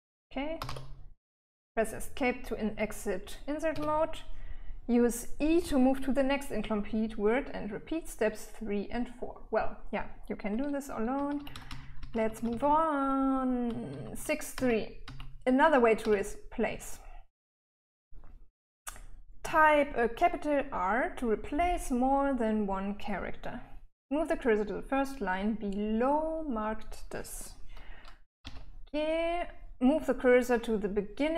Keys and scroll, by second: 0.6-1.5 typing, 4.0 Escape, 11.4-16.3 typing, 28.7 k.